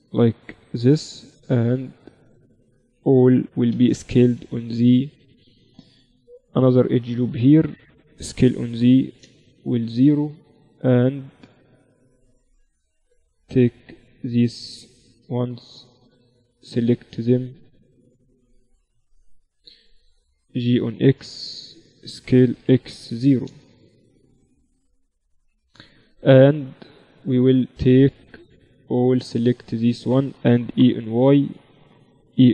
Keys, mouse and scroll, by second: 0.2 a, 0.9 b, 2.9 s, 5.1-6.5 middle drag, 6.5 ctrl+r, 8.3 s, 10.5-12.5 drag, 13.3-15.3 right drag, 14.3 a, 15.3 b, 18.3 c, 20.1-22.0 drag, 22.4 s, 24.5 z, 25.1 z, 26.9-28.6 drag, 27.1 z, 27.9 right click, 29.6-31.2 right drag, 30.5 e, 32.3 e.